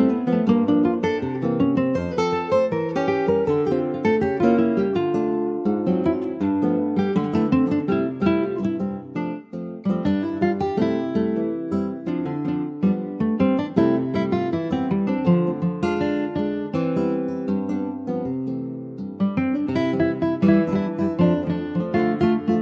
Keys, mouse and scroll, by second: 0.0 s, 1.8 click, 2.3 alt+middle click, 3.1 ctrl+s, 3.6 s, 6.0 click, 6.4 s, 8.6 click, 9.2 s, 12.5 middle click, 13.1 ctrl+s, 13.3 scroll down 1, 13.5 middle click, 14.1 click, 14.5 scroll up 3, 14.7 ctrl+s, 14.9 click, 15.2-16.3 middle drag, 16.3 click, 18.2 ctrl+s, 18.4 middle click, 18.8-19.2 scroll up 2, 19.2 shift+middle click, 19.9 ctrl+s, 20.3 click, 21.7 click, 22.0 scroll down 2, 22.4 ctrl+s, 22.5 click.